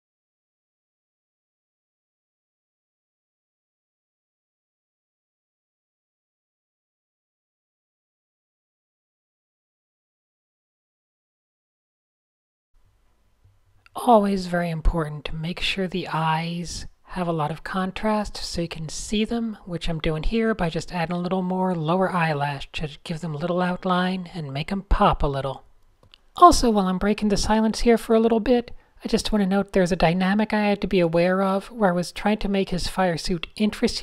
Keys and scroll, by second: 1.3 super+z, 2.3 a, 3.8 shift+super+}, 4.0 shift+super+a, 4.5 n, 7.7-8.5 typing, 10.8-12.6 typing, 15.0 d, 16.3 a, 17.4 n, 17.6 super+space, 17.7 super+space, 17.8 n, 19.0 a, 19.8 n, 20.9 super+z, 21.9 super+0, 25.8 n, 25.9 super+space, 26.0 super+space, 29.3-34.0 typing, 29.6 super+z.